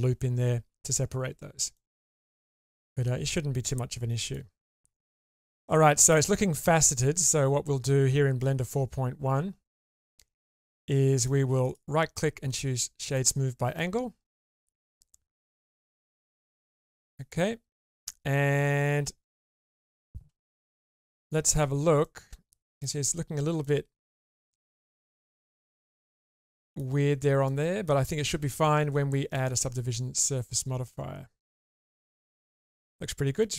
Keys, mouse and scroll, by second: 1.7-4.3 middle drag, 4.8 Tab, 6.1-7.0 middle drag, 10.2-11.2 middle drag, 11.7 right click, 13.2-13.8 middle drag, 14.2 click, 14.7 Tab, 15.6 click, 17.3 middle click, 19.3 middle click, 20.6 shift+space, 22.0 middle click, 23.6 click, 23.6 middle click, 24.6-25.6 middle drag, 26.5 middle click, 27.4 middle click, 28.0 shift+middle click, 29.3-31.8 drag, 33.4-33.5 drag.